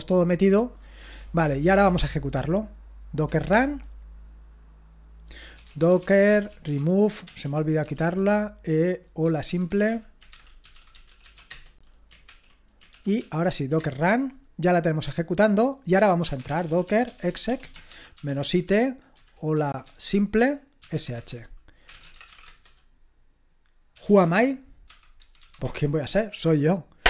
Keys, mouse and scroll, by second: 1.4 ctrl+p, 1.8 ctrl+p, 2.4 ctrl+p, 3.5 Return, 5.3-8.0 typing, 9.0-12.3 typing, 12.3 ctrl+l, 13.0 ctrl+p, 13.8 typing, 16.0-25.9 typing.